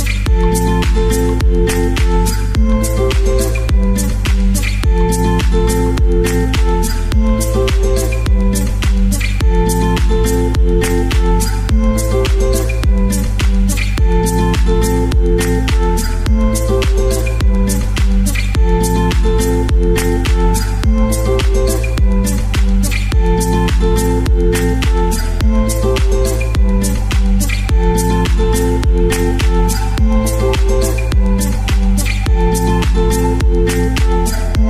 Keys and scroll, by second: 5.1-6.5 typing, 21.8 Page_Down, 21.9 Page_Down, 22.6 Page_Down, 22.9 shift+End, 24.2 space, 31.5 shift+Tab, 32.5 Page_Down, 32.8 Page_Down, 32.9 Page_Down.